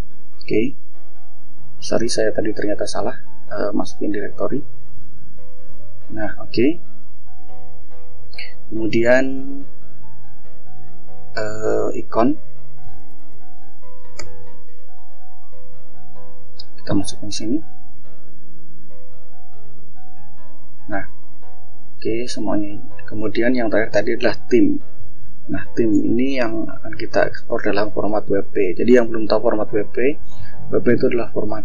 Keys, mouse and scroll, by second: 1.3 click, 4.2 click, 5.8 click, 6.3 scroll down 2, 6.9 scroll up 1, 7.6 click, 11.0-11.5 drag, 11.9-13.5 typing, 16.3 click, 20.1-20.4 scroll down 2, 21.3 click, 22.8 click, 23.3-23.7 drag, 23.9-25.9 typing, 27.1 click, 28.0 click.